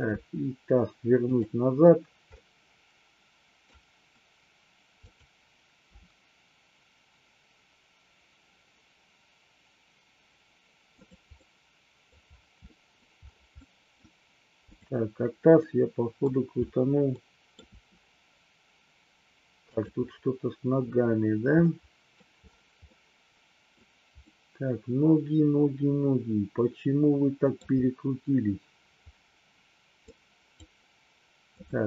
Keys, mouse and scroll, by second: 0.2 r, 1.3 click, 2.3-3.7 middle drag, 5.1 click, 5.9 r, 10.9 click, 11.3-12.1 middle drag, 12.6-12.9 middle drag, 13.6-13.9 middle drag, 15.6-16.2 middle drag, 17.1-17.6 middle drag, 17.7 r, 19.6 click, 21.6-22.1 middle drag, 22.8-23.7 middle drag, 23.7-24.2 scroll down 1, 24.2-27.6 middle drag, 30.2 click, 31.6-31.8 drag.